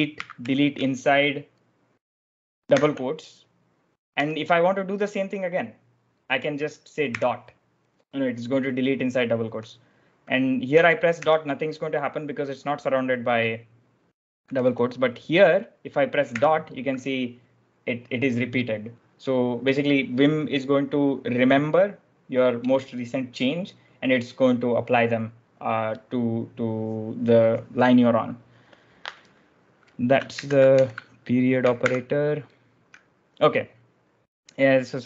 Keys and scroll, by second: 0.0-0.8 typing, 2.7 shift+', 4.0 j, 7.0 ., 9.3 j, 10.6 ., 12.2 ., 14.4 j, 14.5 j, 16.2 ., 30.2 ctrl+j, 30.4-31.2 typing, 31.7 ctrl+f, 34.9-35.0 typing.